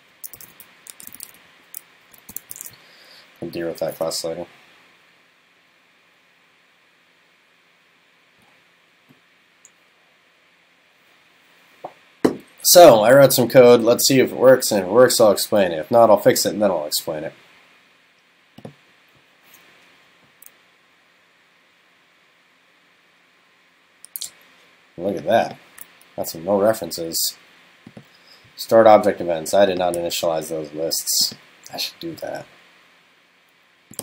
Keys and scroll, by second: 2.6 super+s.